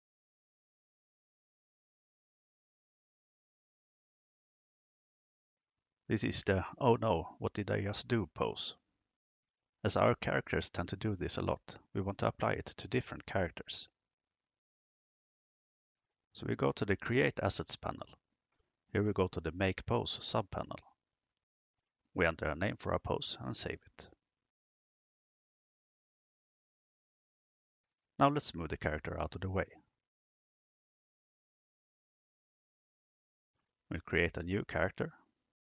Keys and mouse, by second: 0.3 right click, 0.8 r, 3.5 KP_0, 15.0 click, 18.0-18.8 drag, 19.8 click, 21.8-26.4 drag, 27.1 click, 30.1 g, 31.1 x, 33.0 click, 34.1 click, 35.3 drag.